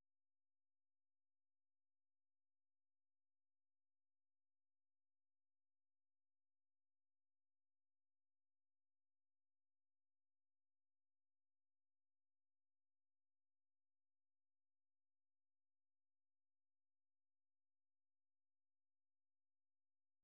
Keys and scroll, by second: 0.8-3.9 typing, 4.8 F6, 5.5-8.0 typing.